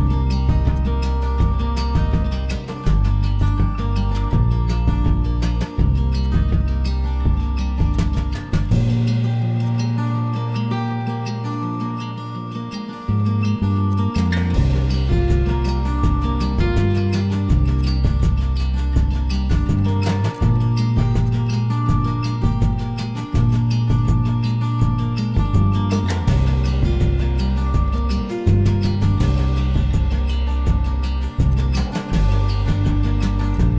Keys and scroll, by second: 4.0 5, 4.2 Return, 6.9 3, 7.0 Return, 28.6-29.9 typing, 32.2 Escape.